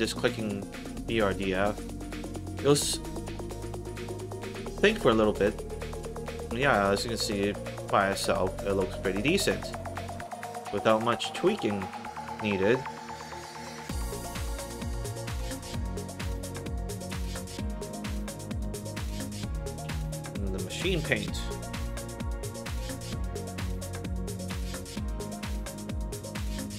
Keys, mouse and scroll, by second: 0.8 click, 5.3 alt+right click, 6.1 alt+click, 6.6 alt+middle click, 7.0 alt+click, 7.5 alt+middle click, 7.9-9.3 alt+drag, 9.6 alt+right click, 9.9 alt+middle click, 12.9 click, 14.7 click, 16.9 click, 18.7 click, 19.7 1, 20.9 click, 25.8 click.